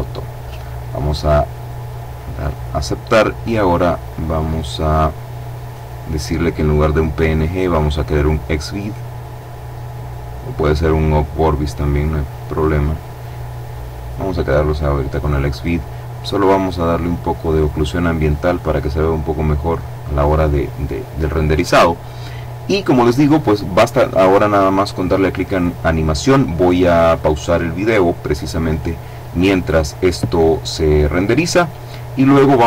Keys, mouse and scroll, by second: 0.7-1.7 drag, 2.5-3.3 scroll down 2, 3.3-4.1 scroll down 2, 5.7 click, 8.5 click, 9.5 click, 11.7 click, 14.9-15.6 scroll up 2, 15.7 click, 17.7 click, 18.9 click, 22.8-23.4 scroll down 1, 23.5-24.1 scroll up 1, 27.8 click.